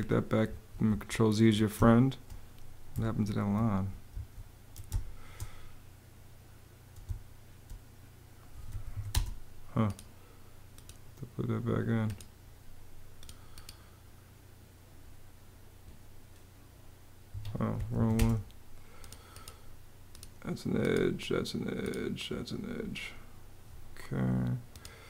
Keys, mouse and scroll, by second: 0.5 super+z, 1.3 super+z, 1.4 super+space, 2.7 super+z, 3.8 super+z, 4.3 super+z, 4.6 super+space, 6.9 space, 8.1-9.1 typing, 17.0 Escape, 17.2-18.1 typing.